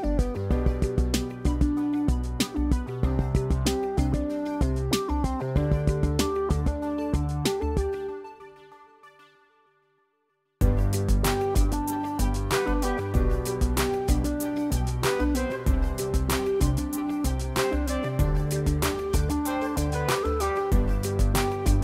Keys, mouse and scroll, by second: 0.0 click, 0.5 F1, 1.0 -, 2.7 ctrl+d, 3.9 click, 4.4 click, 5.8 click, 8.4 click, 10.2 click, 12.6 click, 13.5 F2, 15.1 click, 15.7 click, 17.2 click, 18.1 click, 19.3 click, 19.5 F1, 20.9 ctrl+z.